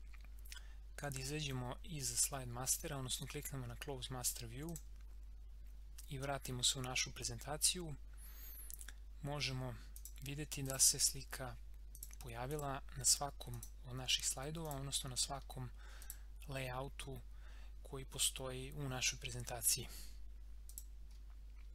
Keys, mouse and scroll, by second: 4.7 click, 8.2 scroll up 1, 10.0 click, 13.9 scroll down 1, 14.6 click, 20.7 click, 21.1 scroll up 1.